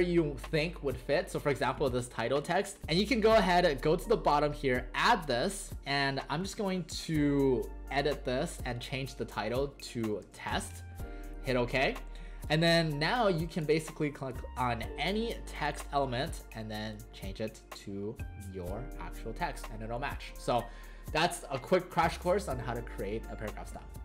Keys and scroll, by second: 10.1 Caps_Lock, 10.3 typing.